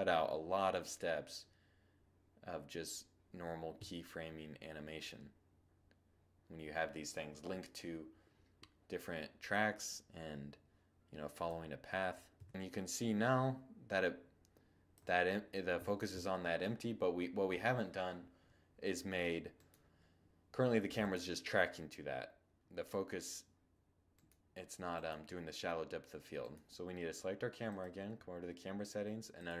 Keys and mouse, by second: 11.2 2, 12.2 1, 14.6-29.6 right drag.